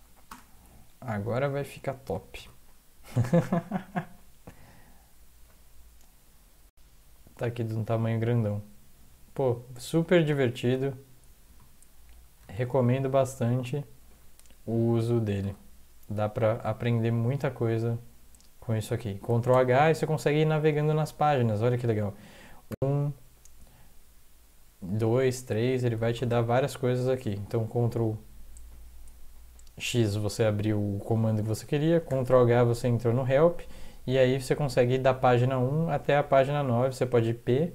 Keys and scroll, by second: 0.0 Up, 0.2 Return, 2.3 ctrl+x, 11.4 ctrl+x, 12.4 ctrl+e, 15.4 ctrl+x, 19.5 ctrl+h, 22.7 Right, 26.1 ctrl+x, 32.1 ctrl+h.